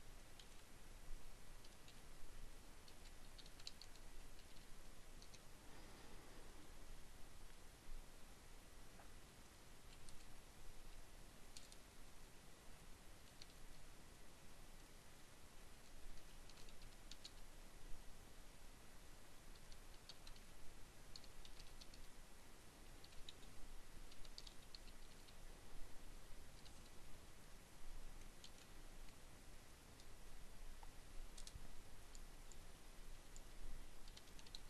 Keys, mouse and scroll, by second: 0.6-4.2 typing, 6.5 shift+a, 9.1 BackSpace, 11.1-12.9 typing, 14.9-17.2 typing, 18.7-20.2 typing, 21.4-24.2 typing, 26.7 shift+,, 29.2 Return, 30.7 space, 32.0-34.6 typing.